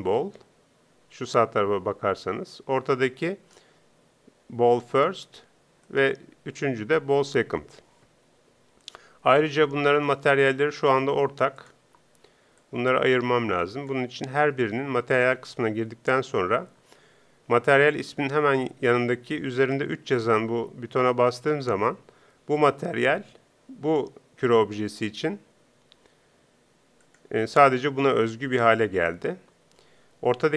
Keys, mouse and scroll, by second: 3.2-5.2 right drag, 5.9-7.8 right drag, 10.0-11.6 right drag, 11.6 middle click, 11.8-14.2 drag, 14.2 middle click, 14.2 click, 27.0-29.0 drag, 30.3-30.5 right drag.